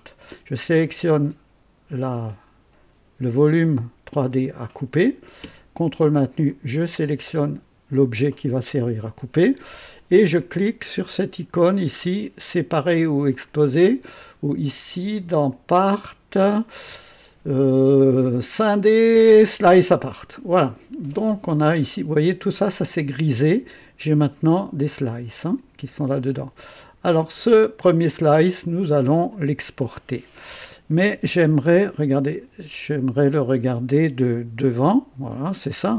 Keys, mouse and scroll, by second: 0.1 click, 3.6-4.4 drag, 6.5 ctrl+click, 11.6 click, 13.3 click, 15.5 click, 19.6 click, 25.3 click, 26.8 click, 27.8-29.6 drag, 31.9 KP_2, 34.5 KP_1.